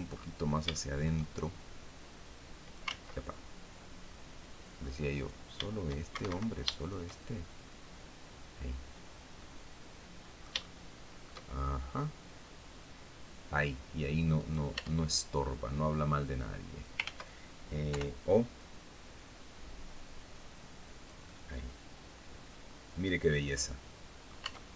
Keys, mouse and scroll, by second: 0.2 shift+middle click, 1.5 click, 2.3 ctrl+z, 3.5 middle click, 4.1-4.4 scroll up 1, 4.6 right click, 5.6 shift+Escape, 6.2 shift+right click, 7.4-8.8 drag, 8.8-10.0 drag, 10.0 shift+middle click, 11.4-13.2 drag, 13.8 right click, 14.2 Tab, 15.7 click, 16.5 ctrl+z, 17.3 o, 18.0-23.9 drag, 23.9 Tab, 24.2 scroll down 1, 24.5-24.7 drag.